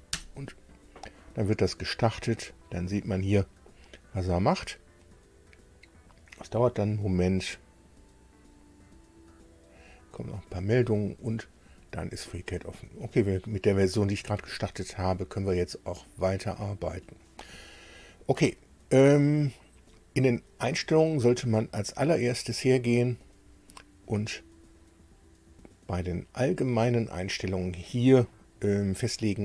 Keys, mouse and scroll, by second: 0.1 Return, 19.9 click, 23.2 click, 28.7 click.